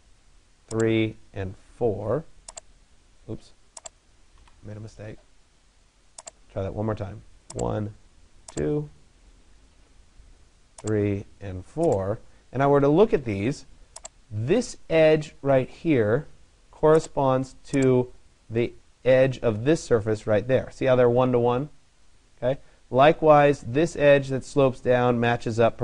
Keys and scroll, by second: 4.0 Delete.